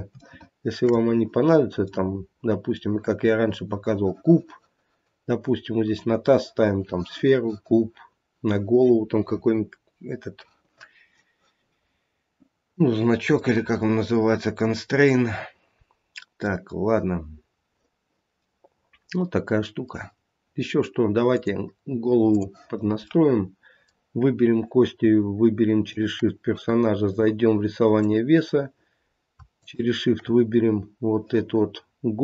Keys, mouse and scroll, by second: 0.2 shift+middle click, 1.9 middle click, 13.0 scroll down 1, 13.4 middle click, 16.1 middle click, 16.3 middle click, 18.4 middle click, 21.3 middle click, 21.3 click, 23.1 middle click, 25.9 shift+click, 27.1 click, 29.5 shift+click, 31.8 scroll up 2.